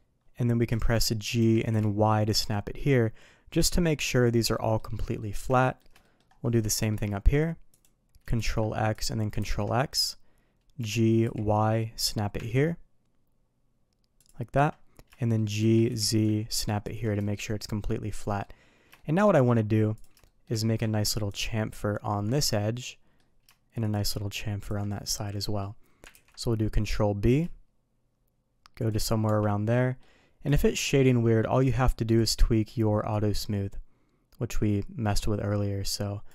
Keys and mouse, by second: 0.7 shift+middle click, 1.3 g, 4.5 middle click, 5.1 middle click, 5.5 shift+middle click, 6.0 middle click, 6.6 shift+middle drag, 8.3 ctrl+x, 8.9 click, 10.0 click, 10.7 g, 15.1 shift+middle click, 17.2 shift+middle click, 18.2 middle click, 18.9 shift+middle drag, 19.3 middle click, 20.2 shift+middle drag, 21.2 ctrl+click, 22.7-23.1 middle drag, 23.7 shift+click, 24.9 middle click, 25.3 middle click, 26.1 ctrl+b, 29.2 Tab, 29.6-30.0 middle drag, 30.5 shift+middle click, 32.1 drag, 33.1-36.2 drag.